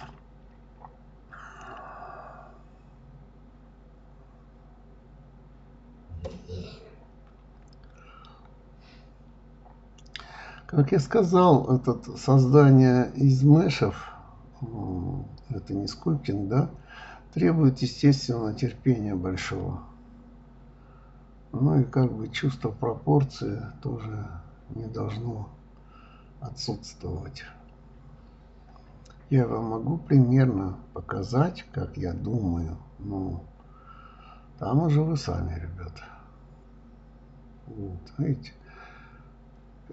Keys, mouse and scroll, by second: 1.0 click, 1.7 click, 3.1 g, 4.9 click, 5.1 middle click, 5.6 scroll down 2, 5.9 middle click, 6.4-6.7 scroll up 3, 6.7 middle click, 7.5 click, 8.0 click, 8.6 click, 9.2 shift+click, 9.4 middle click, 10.3 g, 12.6 drag, 12.8-14.3 middle drag, 15.8 click, 16.3 click, 18.1 s, 20.3 click, 20.4 click, 20.8 s, 22.4-23.9 middle drag, 25.0-26.1 middle drag, 26.1-26.5 scroll up 1, 26.5-28.1 scroll down 2, 28.7 s, 31.1 click, 31.3-32.8 middle drag, 33.7 click, 34.5 click, 35.3 KP_1, 36.2 g, 37.3 click, 37.6-39.1 middle drag, 39.8 click.